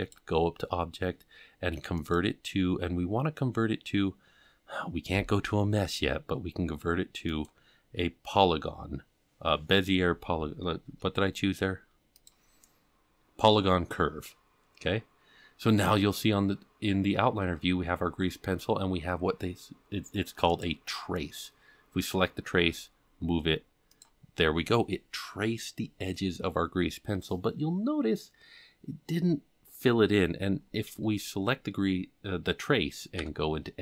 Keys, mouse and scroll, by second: 12.1 click, 20.5 click, 22.6 g, 33.2 Tab.